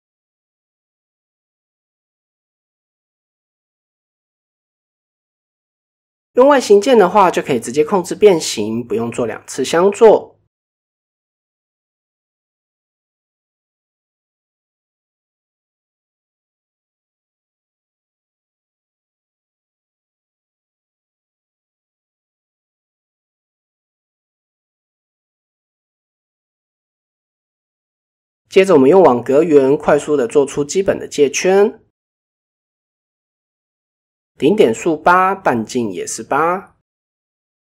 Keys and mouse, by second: 0.7 Tab, 3.0 click, 4.1-4.5 middle drag, 4.7-6.2 middle drag, 6.6 KP_7, 7.0 KP_1, 8.7-9.0 shift+middle drag, 10.7 click, 11.6 shift+middle click, 12.6-13.4 drag, 13.6-13.9 shift+middle drag, 14.6-16.1 drag, 17.1 shift+middle click, 18.4-19.5 drag, 21.5 click, 24.1-24.9 drag, 25.2-25.6 shift+middle drag, 25.6 click, 26.0 shift+middle click, 27.8 shift+a, 30.6-31.1 drag, 32.0 shift+middle click, 32.6 click, 34.4 click, 36.9 click.